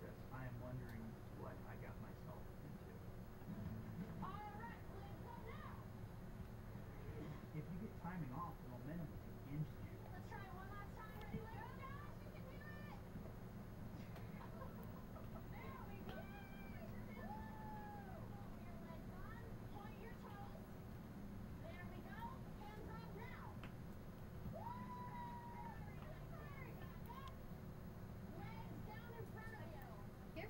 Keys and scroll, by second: 16.1 Delete, 20.1 Delete.